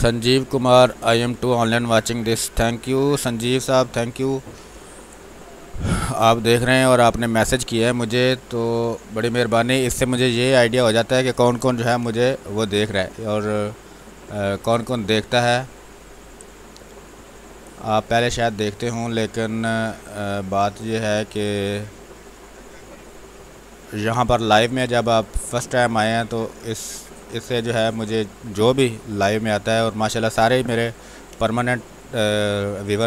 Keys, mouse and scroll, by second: 6.0-10.0 alt+drag, 12.0 space, 16.0-18.0 drag, 18.0 space, 20.0-24.0 drag, 24.0 space, 30.0-32.0 drag, 32.0 space, 32.3-33.0 ctrl+drag.